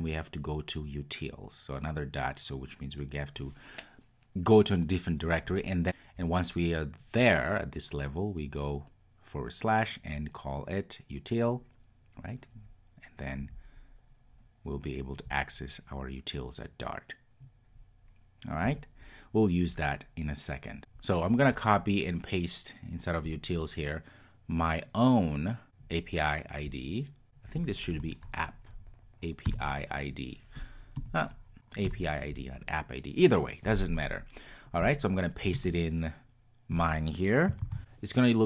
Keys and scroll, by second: 37.6 super+v.